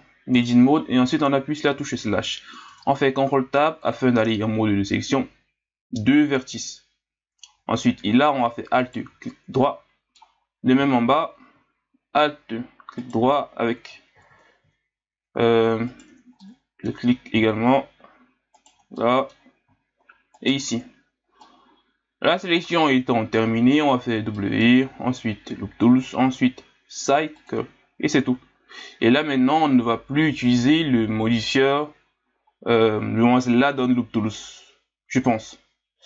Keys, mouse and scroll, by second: 0.3 KP_Divide, 1.7-2.7 middle drag, 2.7 ctrl+Tab, 8.8 alt+right click, 9.6-12.6 middle drag, 13.0 alt+shift+right click, 14.2 ctrl+z, 15.9 alt+shift+right click, 16.4-18.5 middle drag, 18.5 alt+shift+right click, 19.0-20.3 middle drag, 20.3 alt+shift+right click, 21.4-24.8 middle drag, 24.8 w, 28.8-31.8 middle drag, 35.5-36.0 middle drag.